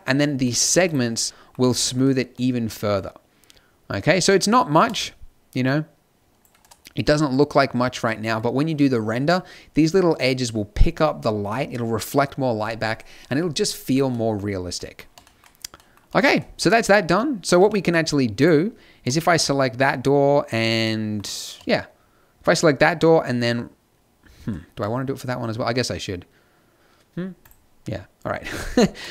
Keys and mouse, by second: 0.3-2.6 middle drag, 4.8-6.6 drag, 6.6-8.1 middle drag, 12.8-14.1 middle drag, 17.0 z, 17.6 z, 18.9-20.8 drag, 25.8-27.4 middle drag, 27.4-29.1 drag.